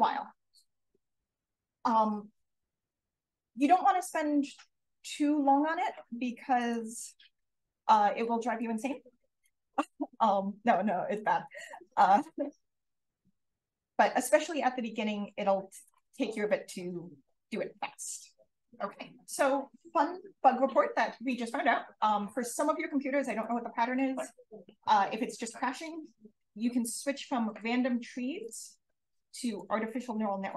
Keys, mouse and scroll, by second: 0.8-1.7 scroll up 1, 1.7-3.2 scroll up 1, 3.2-4.3 scroll up 1, 4.3 scroll up 1, 6.5 click, 7.0 click, 7.5 click, 8.1-8.5 drag, 9.0 click, 9.6 click, 11.0 click, 11.6 click, 12.0 d, 13.2 click, 15.8-18.6 drag, 27.4 click, 28.3 click, 29.4 click.